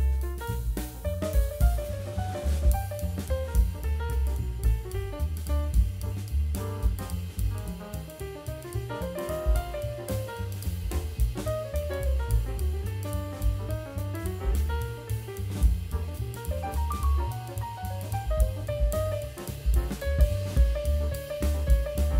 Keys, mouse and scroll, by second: 5.3 click, 5.7-7.1 scroll up 3, 7.1-8.8 scroll down 1, 9.4-10.7 scroll up 6, 10.7-12.1 scroll down 1, 13.0 scroll down 1, 13.7 click, 14.8 click, 15.6-17.1 drag.